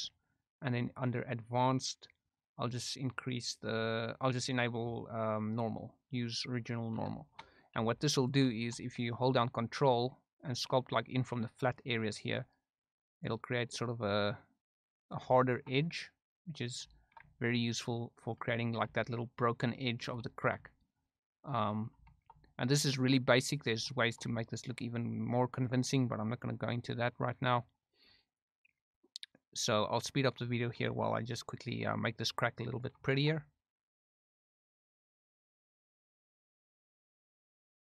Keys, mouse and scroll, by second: 0.8 click, 5.5 click, 7.1 shift+middle click, 7.7 f, 8.5 shift+middle click, 9.5 ctrl+click, 10.8 ctrl+click, 12.1-13.2 ctrl+drag, 13.6-15.1 ctrl+drag, 15.3 shift+middle click, 15.8 ctrl+click, 16.9 shift+middle click, 17.3 ctrl+click, 18.6 shift+middle click, 19.0-20.0 ctrl+drag, 20.2 shift+middle click, 20.7-21.8 ctrl+drag, 22.0 shift+middle click, 22.4-23.6 ctrl+drag, 23.9 shift+middle click, 24.4-25.6 ctrl+drag, 26.0 ctrl+click, 27.0 ctrl+click, 27.8 ctrl+click, 28.7 ctrl+click, 29.7 ctrl+click, 30.5 shift+middle click, 31.0-32.8 ctrl+drag, 33.1 shift+middle click, 33.4 ctrl+click, 34.3 ctrl+f, 34.4 ctrl+click, 34.9 f, 35.0 click, 35.4 ctrl+z, 35.5 ctrl+click, 36.0 ctrl+click, 36.4 ctrl+click, 36.9 f, 37.0 ctrl+click, 37.4 ctrl+click.